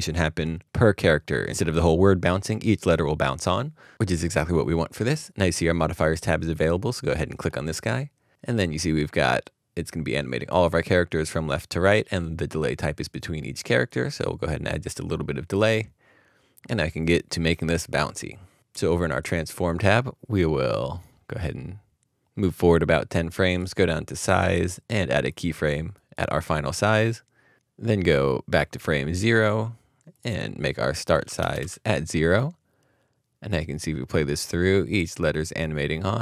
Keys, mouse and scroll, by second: 30.3 right click, 31.2 Tab, 31.6 typing.